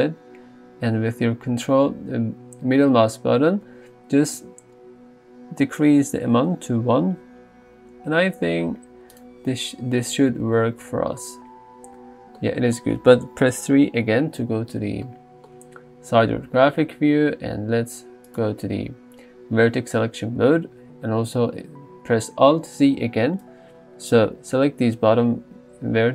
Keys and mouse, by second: 10.5 alt+z, 10.9 Tab, 12.6 Tab, 13.8 KP_3, 15.1 shift+middle click, 22.9 alt+z, 23.5 click.